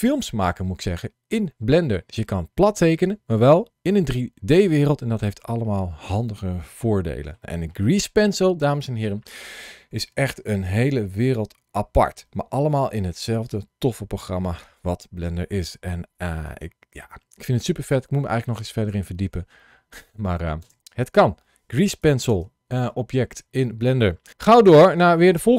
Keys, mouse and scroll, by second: 24.3 shift+middle click, 25.0-25.5 scroll down 1.